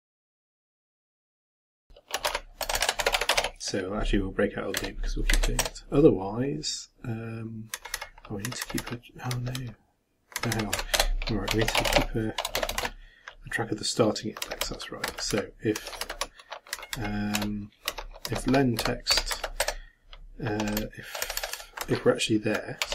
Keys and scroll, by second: 0.0-3.9 typing, 16.7 shift+Up, 17.4 shift+End, 17.9 shift+Down.